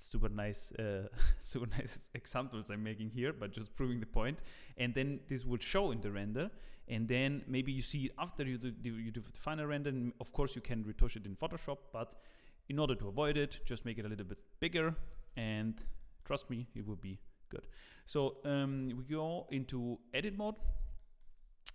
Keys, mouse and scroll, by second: 9.1 middle click, 9.7-12.2 scroll down 1, 13.2 KP_1, 14.0 scroll up 1, 14.7 scroll up 2, 14.8 shift+middle click, 15.3 Tab, 15.3-15.6 scroll up 1, 15.6 scroll down 1, 16.0 shift+middle click, 16.7 a, 17.5 scroll down 1, 17.7 shift+middle click, 18.7 Tab, 20.1 Tab, 20.6 scroll up 1, 21.0 shift+middle click.